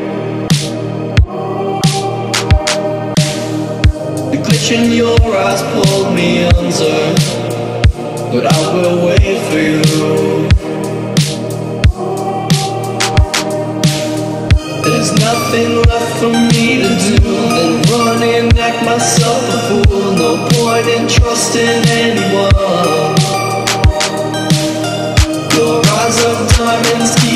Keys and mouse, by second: 1.1 click, 1.7 ctrl+-, 2.8 click, 3.1 Down, 3.9 click, 5.0 alt+shift+click, 6.3 space, 6.5 click, 6.5 space, 7.0 ctrl+=, 7.3 space, 7.5 click, 7.6 space, 7.9-9.5 drag, 9.5 ctrl+=, 9.8 space, 10.0 click, 10.2 space, 11.4 alt+shift+click, 12.4 Left, 13.7 Up, 13.9 Left, 14.5 Left, 14.7-16.2 alt+drag, 16.2 Up, 16.7 Down, 17.2 click, 17.4 space, 17.5 click, 17.7 space, 18.4 ctrl+-, 19.2-26.7 shift+drag, 26.7 Left.